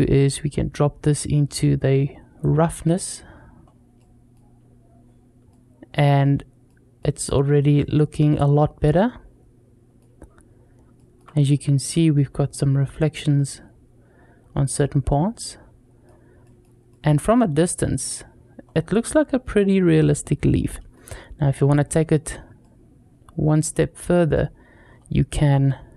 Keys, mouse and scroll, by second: 0.1-2.2 drag, 3.4-3.7 scroll up 1, 3.8-4.2 middle drag, 5.3-5.8 middle drag, 6.1-6.5 scroll down 2, 6.5-6.8 middle drag, 7.6-8.0 middle drag, 8.4 scroll up 2, 8.8-9.9 middle drag, 10.8 shift+middle drag, 11.1 scroll up 2, 14.5 scroll down 2, 14.8-15.9 middle drag, 15.9-16.2 scroll down 2, 16.2 middle drag, 16.7 middle drag, 18.4-19.0 scroll up 2, 18.9-19.3 middle drag, 20.5 middle click, 20.9-21.6 scroll up 2, 21.3 middle click, 22.4-24.2 middle drag, 24.7-25.6 scroll up 3.